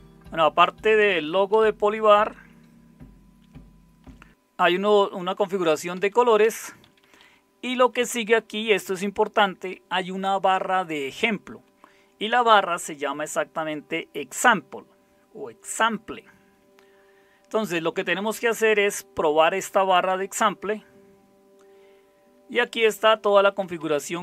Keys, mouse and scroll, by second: 1.5 Down, 2.3 Down, 2.4 Down, 2.5 Down, 4.2 Down, 4.3 Up, 6.6 Down, 7.7 Up, 7.9 Up, 8.1 Up, 8.3 Up, 8.7 Up, 11.4 Right, 11.6 Right, 11.9 Right, 12.7 Right, 16.6-17.5 Down, 17.9 Down, 18.1 Down, 18.3 Down, 19.7-22.6 Down, 22.8 Down, 23.1 Down, 23.2 Down, 23.4 Down, 23.5 Down, 23.7 Down, 23.9 Down, 24.1 Down.